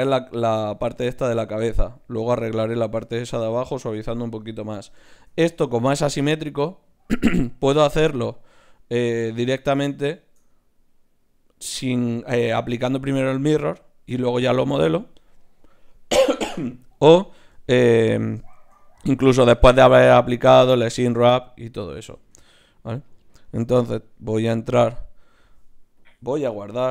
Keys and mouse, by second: 4.3-9.0 middle drag, 22.1 Tab, 24.8-26.9 drag, 24.8-26.9 right drag.